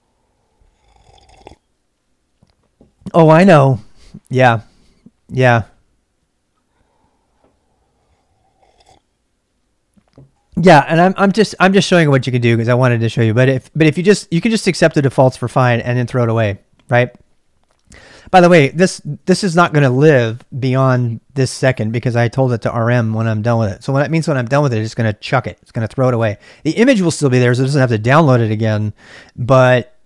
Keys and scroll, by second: 17.9-19.0 typing.